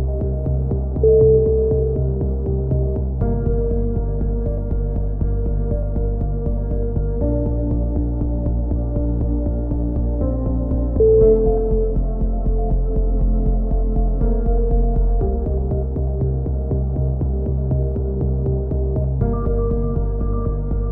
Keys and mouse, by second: 1.6 z, 3.3 Tab, 3.5 z, 4.0 z, 5.5 click, 5.7 right click, 7.7-9.1 middle drag, 9.1-10.2 right drag, 10.2 middle click, 10.8 click, 12.3 click, 14.3 middle click, 14.3 a, 14.6-16.2 drag, 16.2 middle click, 16.3-17.6 drag, 16.6 right click, 18.6 click, 19.5 ctrl+z, 20.0 click, 20.7 click, 20.7 z.